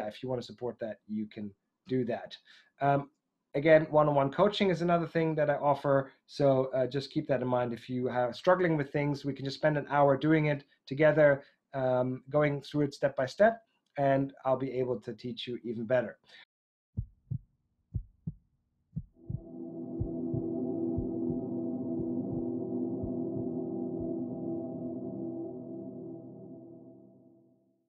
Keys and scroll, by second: 1.7 Down, 15.6 Down.